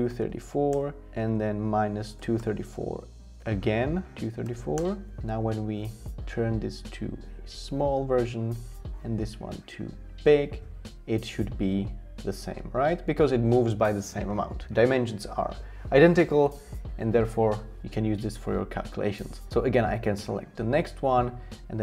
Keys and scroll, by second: 0.0-4.9 typing, 1.2 Tab, 19.5 typing, 21.6 Tab.